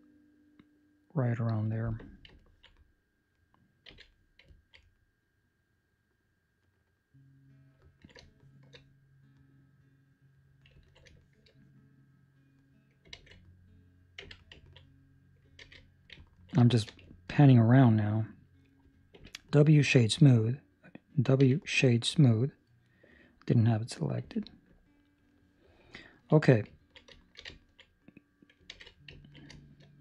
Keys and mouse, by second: 2.3 ctrl+middle click, 2.7 middle click, 3.8 z, 4.4 ctrl+middle click, 4.8 middle click, 7.8 ctrl+middle click, 8.2 shift+middle click, 8.9 middle click, 10.7 ctrl+middle click, 11.1 shift+middle click, 11.6 middle click, 13.1 alt+a, 14.1 Tab, 14.6 ctrl+middle click, 14.7 middle click, 15.5 alt+a, 16.1 ctrl+middle click, 16.5 shift+middle click, 17.2 ctrl+middle click, 19.1 w, 21.3 w, 22.8 right click, 24.1 w, 25.9 ctrl+middle click, 26.5 middle click, 27.3 shift+middle click, 27.7 ctrl+middle click, 27.9 middle click, 28.7 alt+a, 29.2 ctrl+middle click, 29.5 shift+middle click.